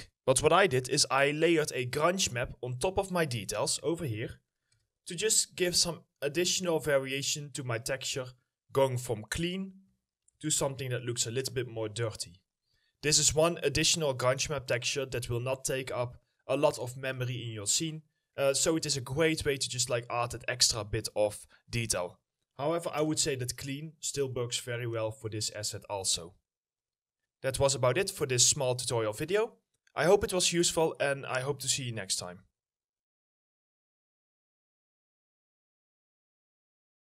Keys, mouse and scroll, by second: 6.3 right click, 6.4 d, 8.3 right click, 8.5 w, 11.9 Return, 13.0 right click, 15.5 right click, 15.7 a, 17.4 right click, 24.3 right click.